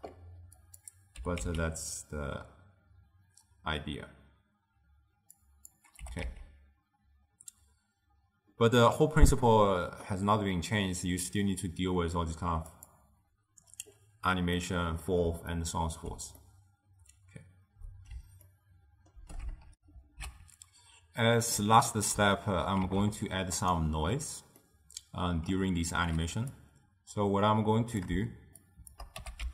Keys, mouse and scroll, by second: 1.4 g, 6.1 g, 14.7-19.8 middle drag, 19.8 ctrl+alt+shift+w, 20.0 ctrl+alt+shift+q, 23.5 ctrl+a, 24.7-26.7 middle drag, 26.7-28.8 drag, 29.3 g.